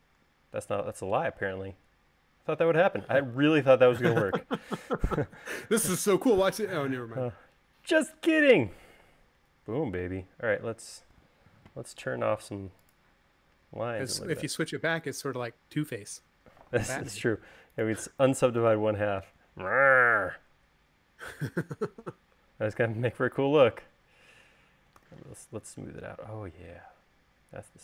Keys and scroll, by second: 5.4 u, 18.9 u, 25.3 u.